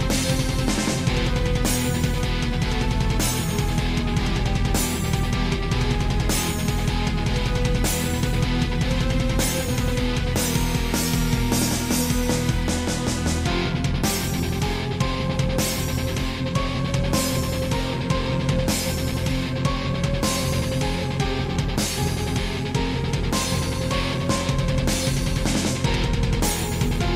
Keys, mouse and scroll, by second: 0.2 click, 0.3 click, 1.6 click, 2.5 click, 3.3 click, 3.8 scroll down 1, 4.0 shift+middle click, 4.4 scroll up 1, 4.6 middle click, 5.0 scroll up 1, 5.4 shift+middle click, 5.6 middle click, 6.5 click, 8.4 click, 9.4 click, 10.5 middle click, 11.2 typing, 14.8 Escape, 15.3 alt+r, 16.3 middle click, 16.8 click, 18.1 r, 18.9 y, 19.9 Escape, 20.3 shift+middle click, 20.9 middle click, 21.3 scroll down 2, 21.7 shift+middle click, 22.6 click, 23.9 7, 24.6 scroll up 3, 25.0 g, 26.2 click, 26.7 middle click.